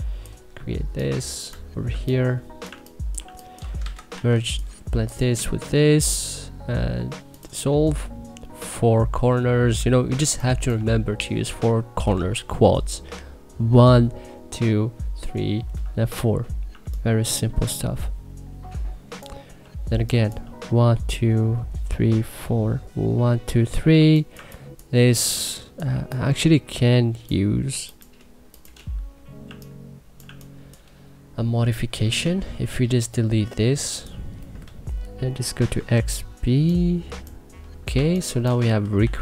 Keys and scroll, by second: 1.7-3.9 typing, 9.9 1, 16.4 1, 19.4 2, 23.7 1, 24.1 2, 25.7 1, 29.2 1, 30.0 2, 32.0 w, 34.4 Delete, 35.4 x, 35.7 b, 37.7 2, 38.8 e.